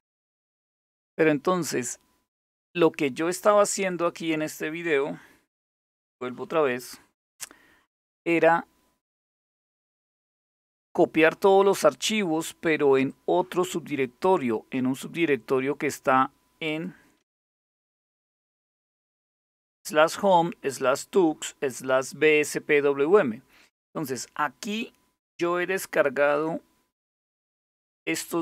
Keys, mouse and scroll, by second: 3.5 click, 6.5 super+0, 12.7 click, 16.3 click, 17.2-18.5 typing, 27.9-28.4 drag.